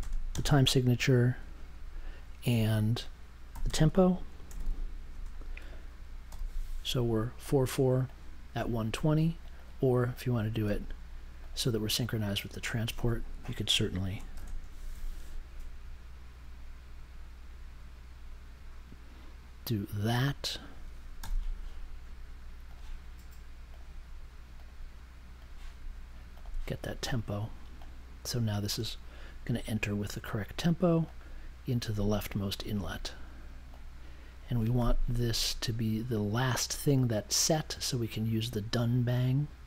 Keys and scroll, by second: 0.0-2.4 typing, 3.5-5.2 typing, 6.2 super+j, 14.3 shift+4, 14.8 1, 21.2 m.